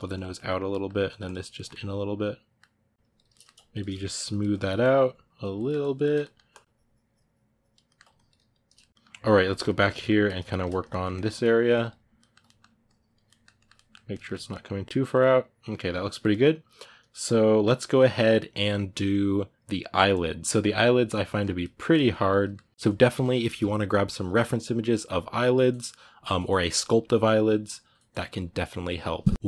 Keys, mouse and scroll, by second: 0.1 middle click, 0.9 click, 1.3-2.8 ctrl+middle drag, 2.8 shift+click, 3.1 ctrl+middle click, 3.5 shift+click, 3.7 middle click, 4.1 click, 4.3 ctrl+middle click, 4.6 click, 5.3 ctrl+middle click, 5.6 shift+click, 5.8 ctrl+middle click, 6.3-7.6 ctrl+drag, 7.6 ctrl+middle click, 7.9 shift+click, 8.6-10.0 ctrl+middle drag, 8.9 click, 10.0 ctrl+click, 10.2 ctrl+shift+middle click, 11.2 ctrl+click, 12.0 ctrl+middle click, 12.6 ctrl+click, 13.1-29.4 ctrl+middle drag.